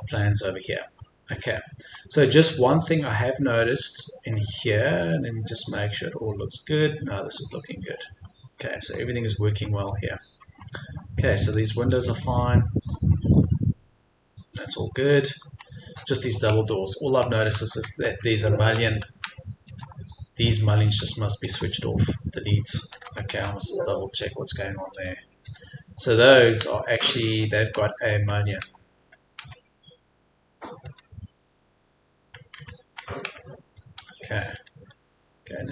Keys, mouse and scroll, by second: 0.0-1.0 scroll down 1, 1.0 middle click, 1.8-2.2 scroll up 1, 2.2 middle click, 2.6-3.2 scroll down 1, 3.2-3.8 scroll up 1, 4.3 middle click, 5.3-6.6 scroll down 1, 7.4 middle click, 9.0-9.6 scroll down 1, 9.6 middle click, 10.6-11.0 scroll up 1, 12.1-12.6 scroll down 1, 12.6 middle click, 14.4-14.9 scroll down 1, 14.9 middle click, 15.6-16.0 scroll up 1, 18.0 Tab, 19.6 click, 21.4 Delete, 24.9 click, 26.1 Escape, 27.3 Tab, 30.8 click, 32.2 Tab, 34.0 Escape, 34.5 click.